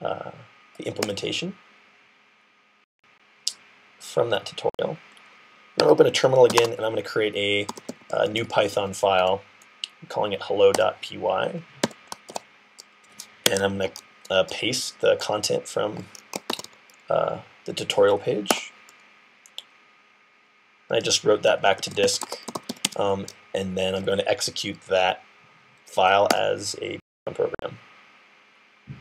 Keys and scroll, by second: 6.3-9.1 typing, 11.7 i, 12.1 super+v, 13.3 Escape, 16.1-17.0 typing, 21.2-23.0 typing.